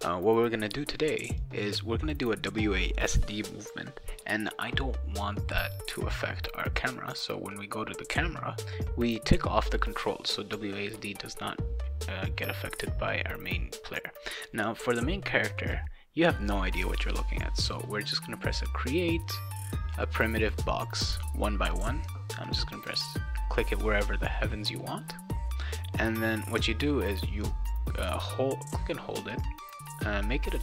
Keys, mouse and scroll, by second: 1.4 click, 5.6 click, 6.9 click, 9.7 click, 9.9 click, 14.8 click, 17.0 right click, 20.4 click, 21.7 click, 22.9 click, 27.7-30.6 drag.